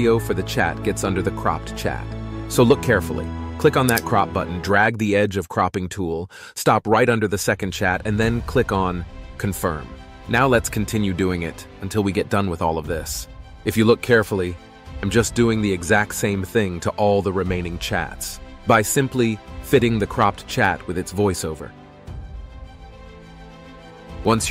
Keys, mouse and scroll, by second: 1.4 space, 1.5 space, 2.4 ctrl+b, 13.5 ctrl+b, 14.0 space, 14.4 space, 15.8 space, 16.2 space, 20.0 space, 20.2 space, 22.1 ctrl+space, 22.6 ctrl+space, 22.9 ctrl+space, 23.2 Delete, 23.3 ctrl+b, 23.5-24.5 typing, 23.5 ctrl+b, 23.8 ctrl+b, 23.8 Delete, 23.8 ctrl+b, 24.0 ctrl+b, 24.1 ctrl+b, 24.1 Delete, 24.2 Delete.